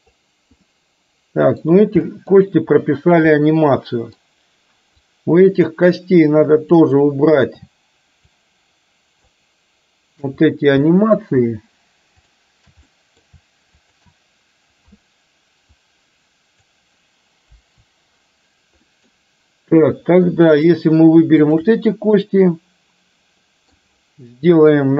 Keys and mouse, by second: 0.7-1.7 middle drag, 2.2 middle click, 3.5-4.2 middle drag, 5.0-6.9 drag, 8.5-9.4 shift+drag, 11.0 middle click, 12.3 shift+click, 13.0 middle click, 15.8-16.9 drag, 17.5 Delete, 18.9-19.3 middle drag, 21.5 shift+click, 22.3-23.9 middle drag.